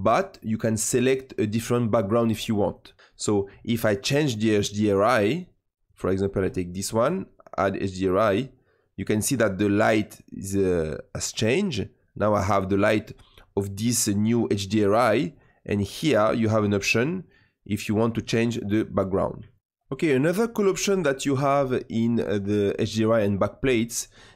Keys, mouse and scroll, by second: 0.0-3.2 drag, 5.8-10.0 drag, 10.8-13.9 middle drag, 15.2-19.5 drag, 19.5 shift+middle click.